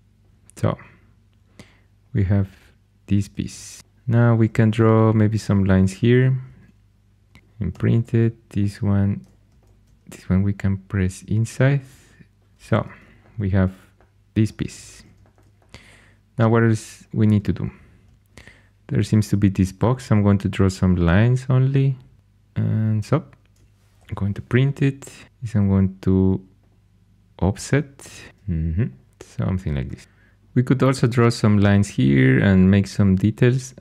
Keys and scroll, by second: 0.2 shift+super+e, 3.4 shift+super+e, 4.4 shift+a, 6.4-8.1 typing, 12.6 shift+super+e, 14.6 shift+super+e, 19.6 shift+a, 23.9 shift+Tab, 25.2 3, 28.3 2.